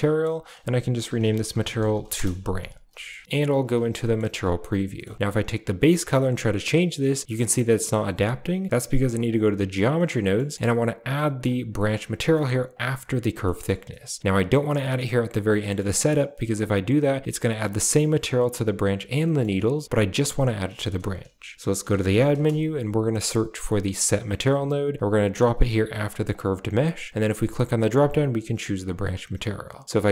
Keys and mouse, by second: 0.0 click, 0.3-2.0 drag, 2.8 shift+middle click, 3.1 a, 3.2 z, 3.8 a, 4.0 middle drag, 5.2 click, 7.3 middle click, 9.2 click, 9.8 middle click, 10.5 middle click, 11.0 middle click, 11.6 click, 12.2 middle click, 12.6 click, 13.3 middle click, 14.3 click, 15.5 middle click, 16.1-16.6 drag, 19.1 middle click, 20.9 shift+a, 26.2 click, 27.1 click, 29.9 click.